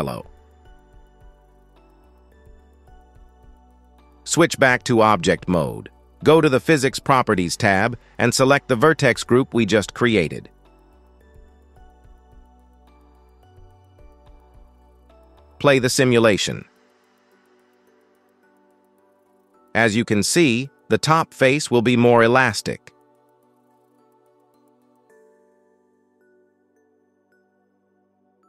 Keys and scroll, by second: 17.7 space, 22.3 space, 23.0 shift+Left, 23.2 space, 27.2 space, 27.7 shift+Left.